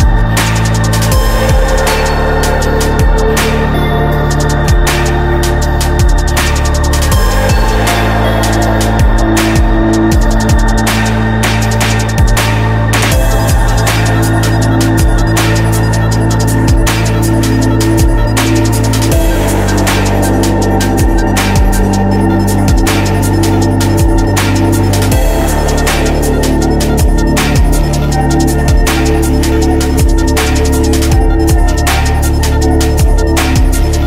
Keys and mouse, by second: 0.7-4.6 right drag, 4.6-6.0 drag, 6.0 middle click, 6.8-11.4 drag, 14.6 ctrl+z, 15.5-16.5 drag, 17.8 click, 18.6 click, 20.1 ctrl+z, 20.5 ctrl+z, 20.7 ctrl+z, 21.5 right click, 23.4-25.3 right drag, 29.6-32.7 drag, 33.2-34.0 drag.